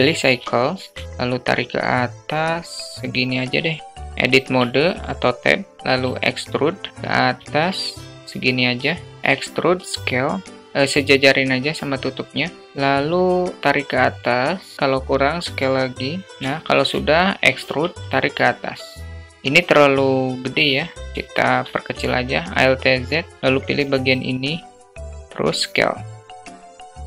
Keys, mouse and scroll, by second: 0.4-1.2 drag, 2.3 s, 4.0 Tab, 5.4 e, 8.8 e, 12.6-14.8 drag, 14.8 s, 16.4 e, 18.8 alt+shift+middle click, 19.5 click, 19.7 click, 20.7 alt+shift+middle click, 21.3 alt+z, 22.4 click, 24.3 s.